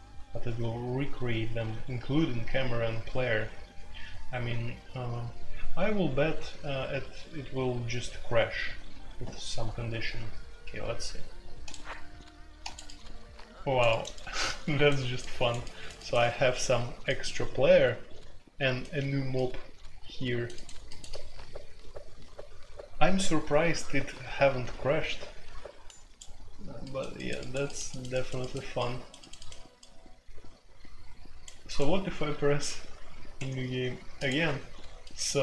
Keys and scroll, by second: 33.3 Escape.